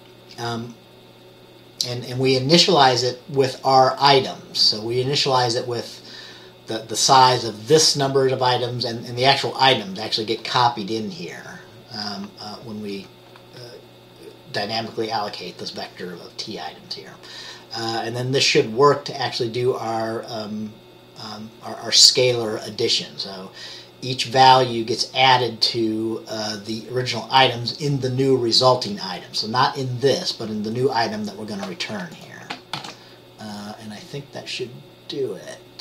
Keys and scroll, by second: 32.9 ctrl+s.